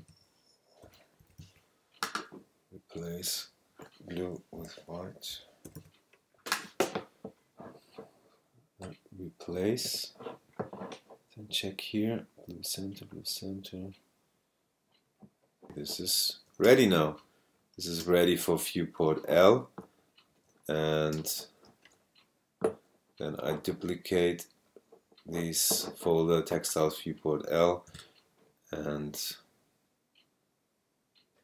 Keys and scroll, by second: 0.0-1.9 typing, 4.6-6.3 typing, 15.6 super+space, 16.1 super+space, 16.6 super+space, 18.0 super+space, 18.9 space, 21.1 super+space, 22.1 space.